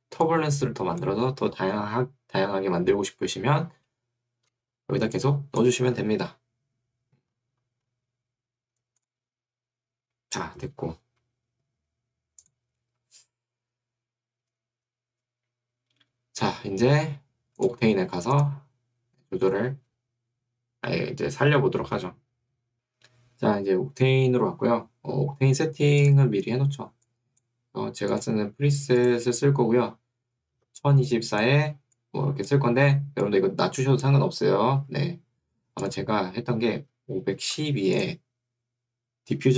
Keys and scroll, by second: 1.5 Escape, 6.1 Escape, 34.8 Escape, 36.8-38.1 typing.